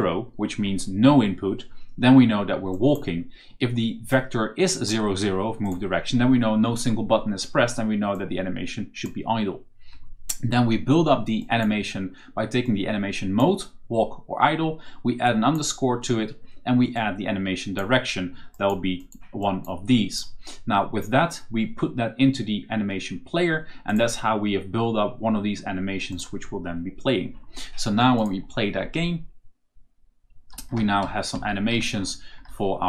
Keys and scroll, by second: 30.2-32.8 typing.